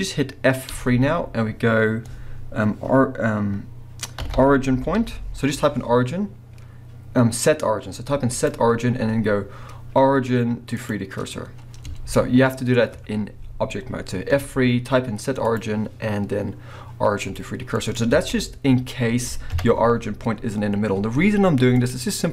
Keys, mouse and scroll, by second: 0.7 F3, 11.9 Tab, 12.4-12.8 scroll down 2, 14.3 F3, 16.2-21.8 middle drag, 18.0 scroll up 2, 18.1 alt+a, 19.5 KP_3, 20.0-21.1 scroll up 2, 21.1-21.8 scroll up 1, 21.8 click, 22.1-22.3 scroll down 2.